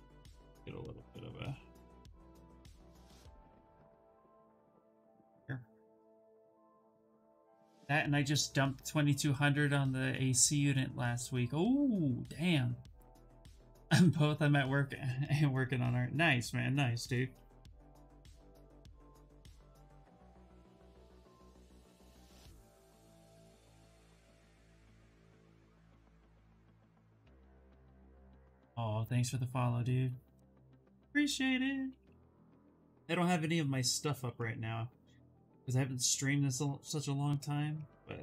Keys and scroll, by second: 18.0-19.4 typing, 33.7 ctrl+z.